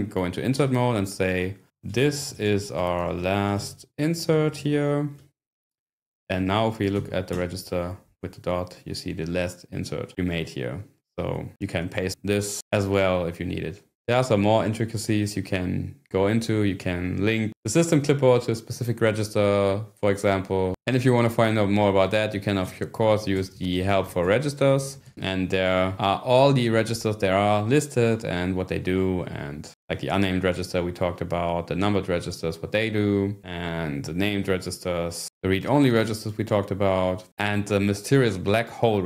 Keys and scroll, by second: 0.6-2.9 typing, 5.2 Escape, 6.3-7.4 typing, 20.9 :, 22.6-25.7 typing.